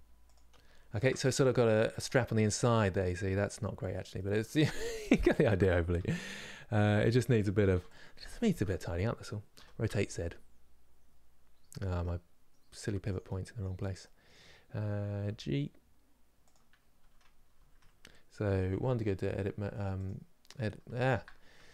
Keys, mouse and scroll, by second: 0.4 scroll down 3, 0.7 Tab, 1.0 middle click, 1.4-1.8 scroll down 1, 1.8 click, 2.0-3.3 middle drag, 3.3 scroll up 3, 3.9-5.4 shift+middle drag, 5.4 scroll up 2, 5.9-7.6 middle drag, 7.6 click, 13.0-15.0 middle drag, 15.0 g, 17.3 Tab, 18.4 1, 19.7 click, 21.0 Tab, 21.6 click.